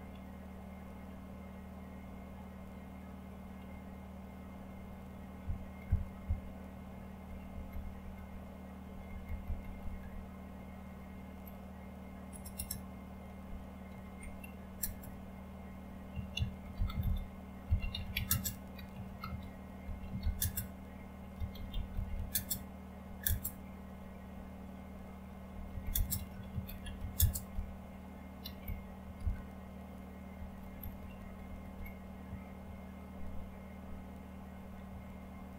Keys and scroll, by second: 4.1 Up, 5.4 Up, 5.8 Up, 6.0 Up, 6.2 Up, 7.2 Down, 7.5 Down, 7.7 Down, 7.9-9.5 Down, 12.3 typing, 13.9-14.8 typing, 15.8-23.2 typing, 25.5-35.5 typing.